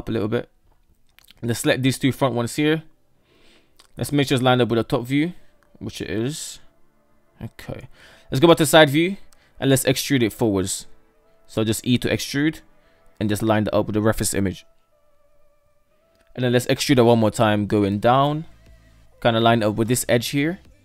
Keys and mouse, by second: 0.6 right click, 0.8 shift+right click, 1.3 shift+middle click, 2.0 Tab, 2.4 KP_7, 4.2 Tab, 5.6 shift+middle click, 5.9 shift+middle click, 6.8 shift+middle click, 7.2 Tab, 7.4 KP_3, 9.0 shift+middle click, 9.4 Tab, 11.3 shift+middle click, 11.4 shift+middle click, 11.8 e, 15.1-15.6 shift+middle drag, 17.0 e.